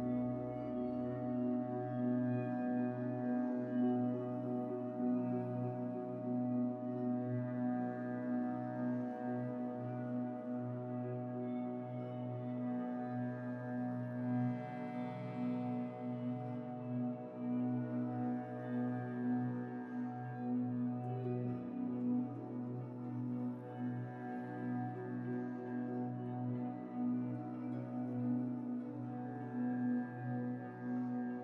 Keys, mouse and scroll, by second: 1.5-3.7 drag, 3.7 middle click, 3.8 scroll up 2, 4.0 shift+a, 6.3 click, 7.9-9.5 drag, 9.5 middle click, 9.8 shift+d, 12.2 click, 14.0 click, 14.6 scroll down 4, 14.8 middle click, 15.1 g, 15.9 alt+a, 16.1 click, 16.3 g, 16.8 middle click, 17.0 scroll up 1, 17.0 scroll down 3, 17.3 shift+a, 20.7-22.4 drag, 23.1 middle click, 23.4-24.3 scroll up 11, 24.8 scroll up 5, 25.5-29.6 drag, 29.6 scroll down 3, 30.4 scroll down 4, 31.3 scroll down 6.